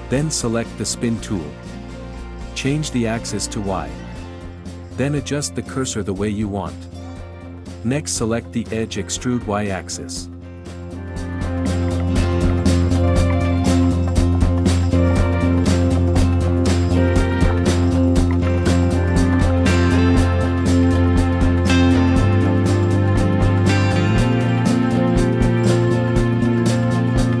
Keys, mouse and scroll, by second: 6.4 w, 8.2 e, 11.3 e, 12.0 scroll down 3, 12.2-13.5 shift+middle drag, 13.5 e, 13.7 s, 14.3 x, 14.6 middle click, 14.8 1, 15.0 ctrl+middle click, 15.5 alt+shift+click, 15.8 ctrl+f, 16.1 middle click, 16.8 click, 17.4 middle click, 17.9-27.4 alt+shift+drag.